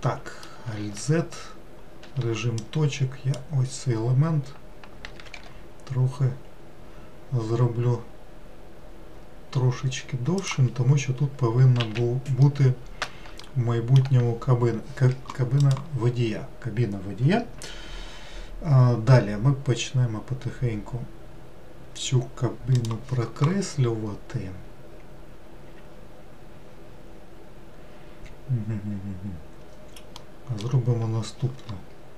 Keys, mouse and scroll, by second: 0.8 alt+z, 2.1 1, 2.6 click, 5.2 g, 11.8 alt+z, 12.5-16.5 middle drag, 30.2-32.1 middle drag.